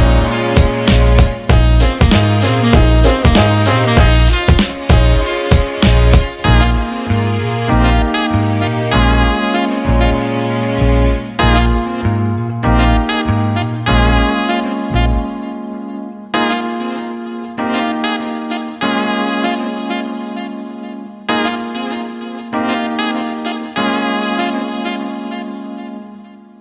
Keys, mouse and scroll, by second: 6.3 alt+middle click, 7.4 click, 8.6-9.8 alt+middle drag, 9.9-11.9 alt+middle drag, 12.4 alt+middle click, 14.0 Tab, 14.8-16.0 drag, 16.7-20.8 drag, 21.3-21.9 alt+middle drag, 22.3 alt+middle click, 22.6 alt+shift+middle drag, 22.9 alt+middle click.